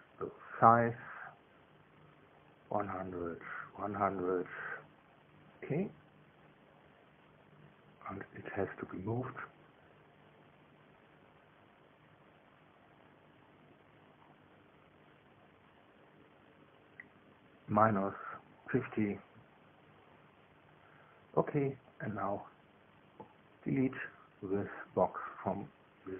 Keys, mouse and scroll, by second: 1.2 click, 3.0 1, 3.2 KP_0, 3.4 KP_0, 3.7 Tab, 4.5 KP_1, 4.7 KP_0, 4.9 KP_0, 5.6 KP_Enter, 7.0-9.5 drag, 11.6-14.8 drag, 15.6 click, 16.7 KP_5, 17.0 KP_0, 19.2 BackSpace, 19.4 BackSpace, 20.3 KP_Subtract, 20.6 KP_5, 20.8 KP_0, 23.9-25.3 drag, 25.7-26.1 drag.